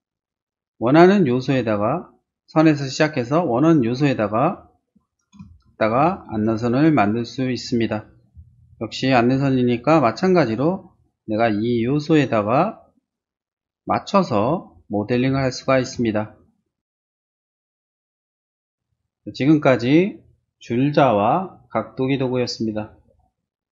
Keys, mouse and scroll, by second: 0.1 click, 2.4 click, 4.9 click, 5.6 shift+middle click, 6.3 shift+space, 9.0 l, 10.0 click, 11.0 click, 11.8 click, 13.0 click, 14.0 click, 14.5 space, 15.3 space, 15.5 middle click, 16.1 shift+middle click.